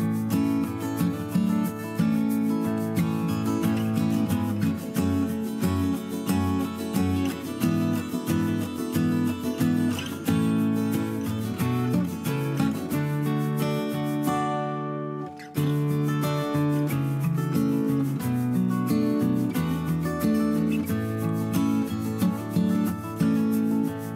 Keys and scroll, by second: 2.1 Delete, 2.6 Right, 2.7 Up, 2.8 Right, 2.9 Left, 4.3 Left, 8.2 ctrl+c, 8.4 ctrl+v, 10.8 Right, 11.2 Up, 11.4 Right, 11.5 Up, 11.7 Down, 12.6 ctrl+c, 12.7 ctrl+v, 19.6 ctrl+-, 19.9 space.